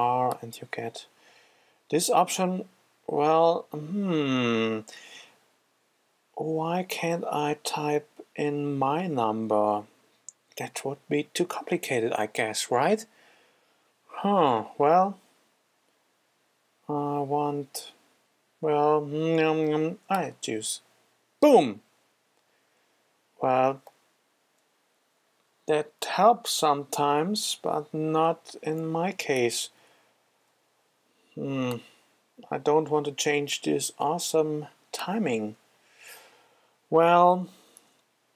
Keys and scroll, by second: 27.6 shift+z, 29.8 super+z, 37.6 super+z.